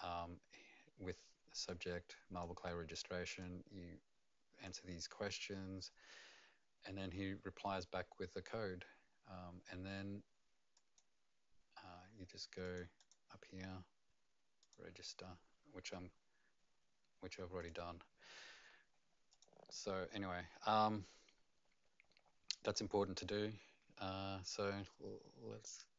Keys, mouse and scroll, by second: 0.1-1.6 scroll down 4, 1.6 click, 3.4 click, 5.0-7.0 scroll down 2, 10.7 click, 12.6 click, 13.0 click, 14.6 click, 17.6 click.